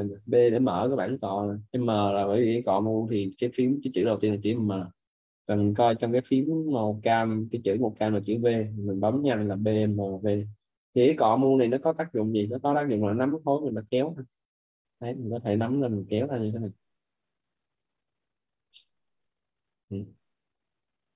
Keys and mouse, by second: 0.1 b, 4.4 m, 9.4-10.8 typing, 12.9 click, 15.2 right click, 16.1 ctrl+z, 16.5 click, 20.1 ctrl+z.